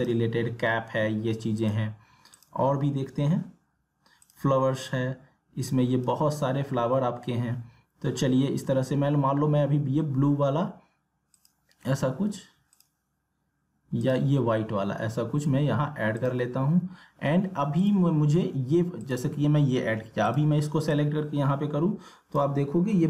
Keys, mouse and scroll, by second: 11.3 click, 11.5-23.0 drag.